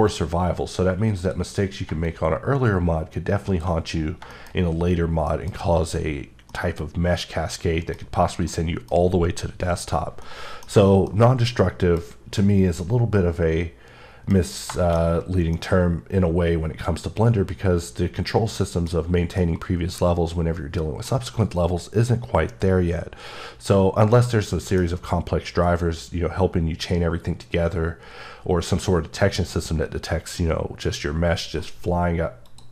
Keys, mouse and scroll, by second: 0.0 click, 2.0 shift+click, 4.0-4.3 scroll down 2, 4.3 shift+middle click, 4.5 scroll up 1, 5.3 middle click, 9.1 scroll up 1, 10.2 middle click, 12.8-13.5 typing, 14.3-14.8 scroll down 2, 14.8 shift+middle click, 15.5 middle click, 20.2-20.9 typing, 24.1 middle click, 32.5-32.7 click.